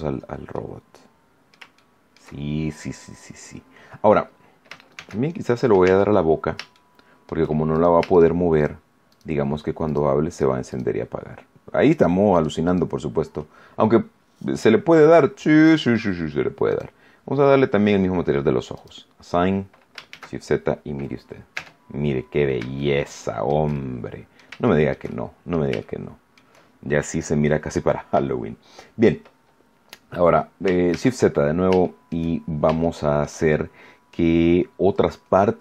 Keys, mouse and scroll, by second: 0.0-0.3 shift+scroll up 3, 0.5-1.6 middle drag, 1.7 shift+middle click, 4.9 shift+z, 5.3 shift+scroll up 1, 5.8 Tab, 6.2 scroll up 1, 6.7 shift+middle click, 7.7 shift+right click, 8.5 shift+right click, 9.0 shift+right click, 9.8 shift+right click, 10.2 shift+right click, 10.6 shift+right click, 11.8 shift+right click, 12.3 shift+right click, 12.6 shift+right click, 15.5 click, 16.6 click, 18.7 click, 20.0 shift+z, 21.5 Tab, 21.9-22.4 scroll down 2, 22.7 shift+middle click, 24.1 middle click, 24.6-25.6 shift+middle drag, 25.8 shift+middle click, 27.2-28.2 middle drag, 30.8 shift+z, 31.3 shift+scroll down 3, 31.8 shift+middle click, 32.4 shift+scroll up 1, 32.8 shift+middle click, 33.4 shift+middle click.